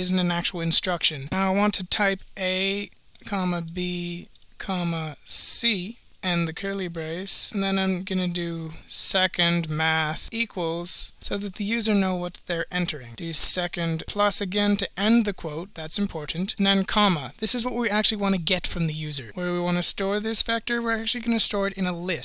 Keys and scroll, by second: 1.3 (, 3.2 ,, 4.3 Left, 4.3 Return, 4.3 Right, 4.3 ,, 7.5 ), 10.3 Return, 16.6 ,, 19.2-20.6 typing, 21.7 1.